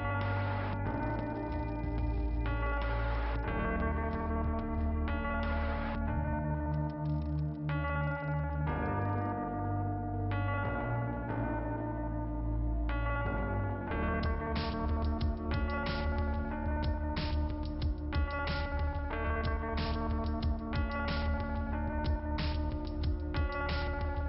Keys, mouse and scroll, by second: 0.6 click, 1.6 click, 1.9 click, 2.0 click, 2.0 double click, 2.4 double click, 2.7 BackSpace, 3.2 click, 4.3 l, 4.4 Return, 4.6 Return, 5.0 Return, 5.7 Return, 7.3 Return, 9.0 click, 9.2 click, 9.6 click, 12.0-13.1 scroll up 1, 13.1 scroll down 1, 15.5 click, 19.7-20.2 scroll down 1, 20.2 scroll up 1, 24.0 scroll down 1.